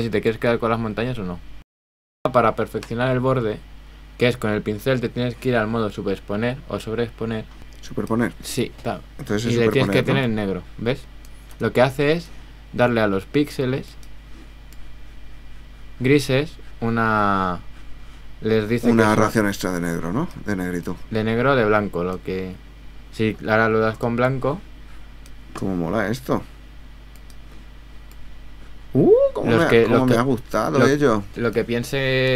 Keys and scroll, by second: 11.9 super+z.